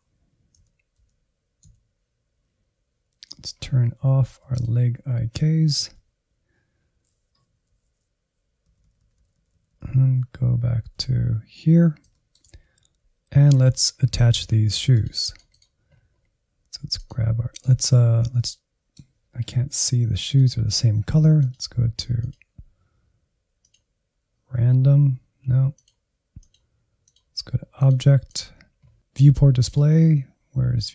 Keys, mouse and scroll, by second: 0.7 Left, 1.0 Down, 1.7 Down, 3.3-4.5 scroll down 6, 4.5-8.6 shift+drag, 8.7-9.5 Left, 9.7 Left, 9.9 Left, 10.1 Left, 11.0 Left, 11.4-12.0 scroll down 1, 12.0-14.8 shift+middle drag, 14.8-18.3 drag, 18.3-20.1 middle drag, 20.1-29.0 drag, 29.0 scroll down 4, 29.4 click, 30.8 click.